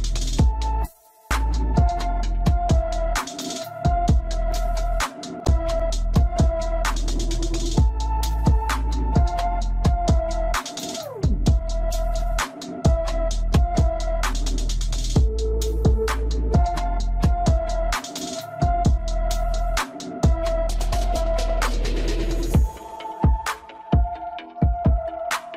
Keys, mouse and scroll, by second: 0.5-3.6 drag, 7.1-7.5 scroll down 2, 7.5-9.7 middle drag, 9.7 KP_1, 10.6-11.0 scroll up 1, 11.0-13.9 shift+middle drag, 13.9-17.0 drag, 18.7 scroll down 1, 19.2-21.8 middle drag, 21.8-24.9 drag, 25.0-25.3 scroll down 2, 25.3-25.5 middle drag.